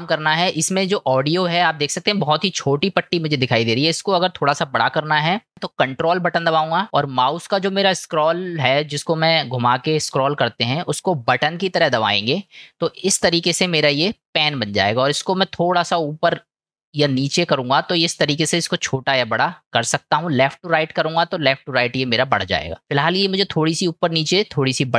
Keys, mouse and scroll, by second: 13.0-24.9 ctrl+middle drag.